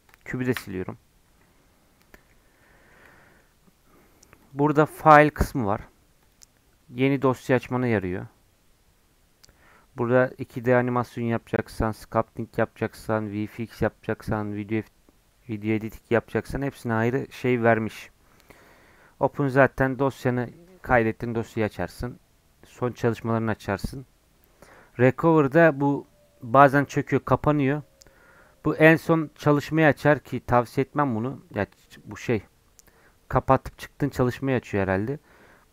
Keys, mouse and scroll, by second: 0.1 click, 0.5 Delete, 2.0-4.4 middle drag, 4.4-35.7 drag.